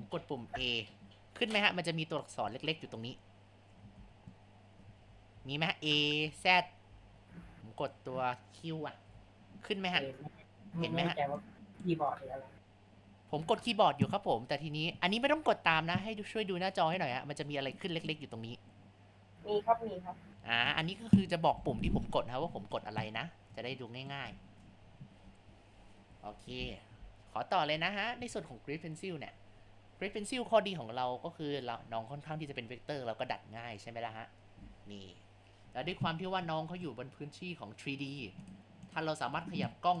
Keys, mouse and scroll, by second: 0.5 a, 3.3 click, 4.2 ctrl+z, 4.4 click, 5.0 ctrl+z, 5.3 a, 6.2 z, 9.1 q, 11.4-14.5 drag, 15.2 ctrl+z, 15.7 ctrl+z, 17.1-20.2 drag, 20.7 ctrl+z, 23.9-26.1 shift+middle drag, 28.6 ctrl+alt+click, 31.7 click, 34.5-35.6 drag, 35.8 ctrl+z, 36.5-40.0 middle drag, 38.9 click.